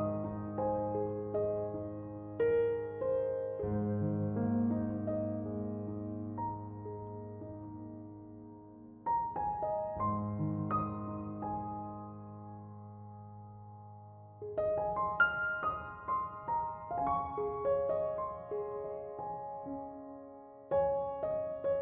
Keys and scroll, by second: 0.9 1, 1.3 8, 1.6 Return.